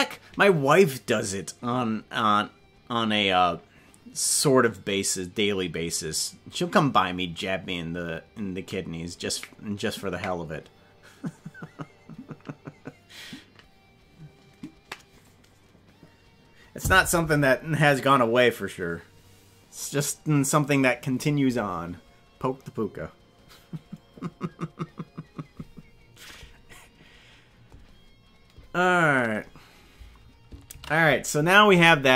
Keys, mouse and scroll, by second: 30.9 ctrl+s.